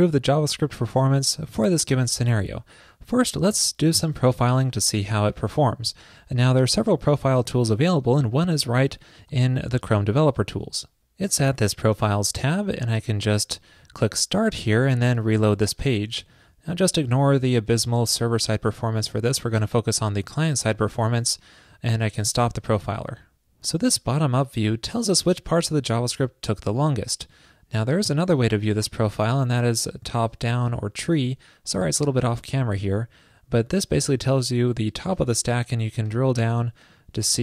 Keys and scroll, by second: 9.4 alt+super+i.